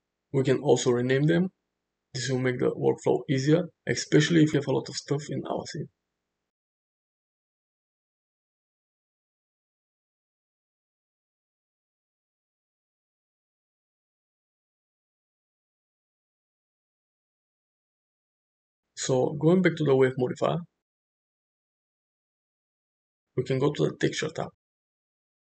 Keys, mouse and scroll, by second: 0.0 middle drag, 0.3 shift+middle click, 2.1-7.9 shift+drag, 8.0-14.4 shift+drag, 22.6 click.